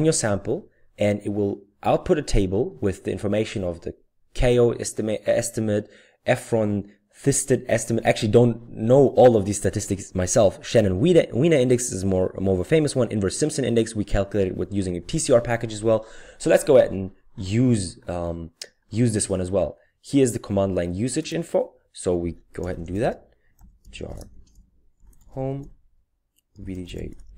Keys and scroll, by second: 22.4-27.3 typing.